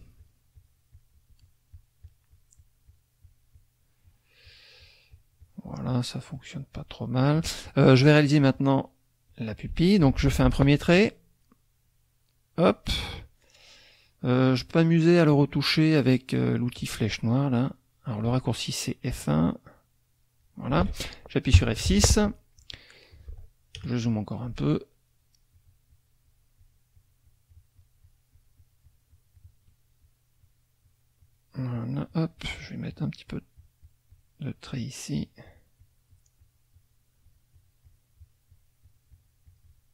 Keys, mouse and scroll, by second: 0.5 shift+click, 0.9 shift+click, 1.4 shift+click, 3.2 shift+click, 4.0 shift+click, 4.4 shift+click, 6.4 shift+click, 6.8 shift+click, 9.3 click, 10.4 ctrl+shift+z, 10.9-12.9 drag, 16.6 click, 17.7 click, 19.0-20.6 drag, 21.5 F6, 23.8 KP_Add, 24.3 KP_Add, 25.2 shift+click, 25.6-29.7 shift+drag, 30.0 shift+click, 32.1-33.2 shift+drag, 33.3 shift+click, 34.7 shift+click, 35.2 shift+click, 37.2-38.5 shift+drag.